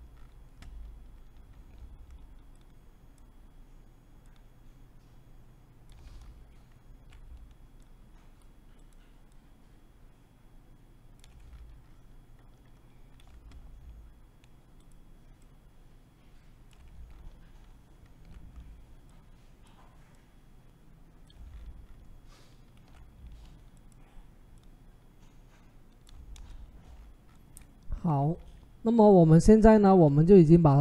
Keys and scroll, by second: 26.1 Return.